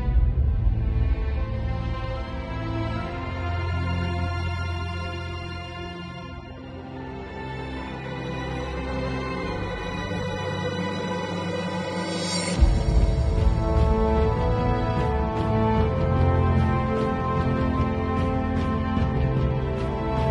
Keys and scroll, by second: 1.6 [, 3.1 ], 5.3 space, 8.1 space, 9.1 v, 11.3 super+[, 12.3 super+l.